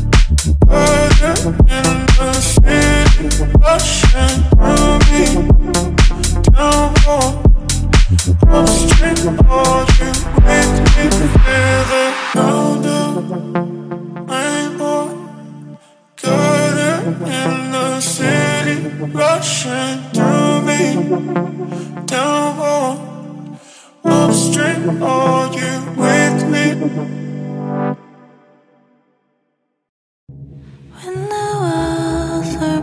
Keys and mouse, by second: 2.5 middle click, 2.9 middle click, 3.5 middle click, 4.3 alt+click, 5.7 Tab, 6.1 middle click, 7.3 ctrl+middle click, 8.3 middle click, 8.8 y, 10.9 KP_1, 11.6 ctrl+middle click, 12.4 click, 12.9 right click, 13.2 shift+middle click, 13.7 ctrl+click, 14.3 shift+z, 15.3 shift+d, 15.4 x, 17.2 shift+d, 17.4 x, 18.7 click, 19.0 ctrl+middle click, 19.2 shift+middle drag, 19.8 ctrl+middle drag, 20.2 shift+drag, 20.4 shift+click, 20.9 shift+d, 21.0 x, 22.2-22.5 middle drag, 22.7 shift+middle click, 24.0-25.1 shift+drag, 25.1 shift+middle drag, 25.6 shift+click, 26.6 shift+d, 26.6 z, 27.7 click, 28.2 shift+middle click, 29.1-29.4 ctrl+drag, 29.6 shift+d, 29.9 z, 30.9 click, 31.5 middle click, 31.9 shift+z, 32.2 ctrl+middle click, 32.5 shift+middle click.